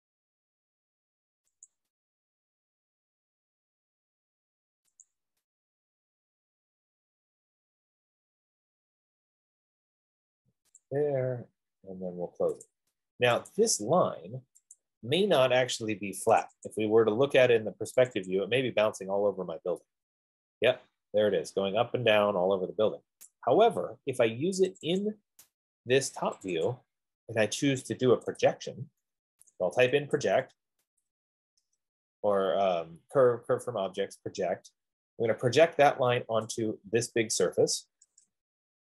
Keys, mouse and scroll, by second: 2.1 click, 2.5 scroll, 3.7 scroll, 5.3 click, 5.8 scroll, 7.3 scroll, 8.5-8.8 scroll, 9.3-9.8 scroll, 11.2 click, 13.0 click, 14.0 click, 15.2 click, 16.6 click, 17.1 click, 18.5 click, 18.6 click, 19.5 middle click, 23.5 right click, 25.0 click, 25.4 click, 26.7 click, 27.0 click, 27.4-29.0 scroll, 30.3-31.0 typing, 31.8 Return, 36.9 click, 38.3 Return.